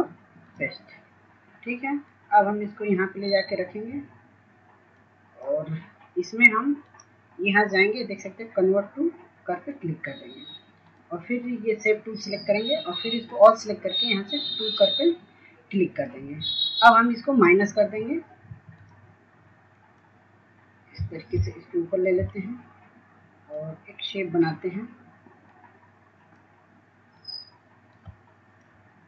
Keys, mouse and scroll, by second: 25.2-29.0 drag.